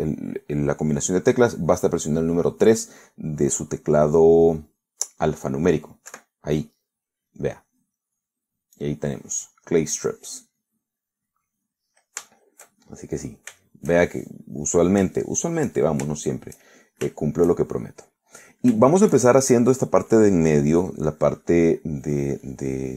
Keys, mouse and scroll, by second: 7.2 3, 9.0-10.4 middle drag, 11.6-13.0 middle drag, 13.3 shift+middle click, 14.2-15.4 shift+scroll up 2, 14.4 shift+middle click, 15.4 middle click, 16.1 shift+scroll up 1, 16.3 shift+middle click, 16.8-17.4 shift+scroll up 1, 17.4-20.7 shift+middle drag, 21.2-22.9 drag.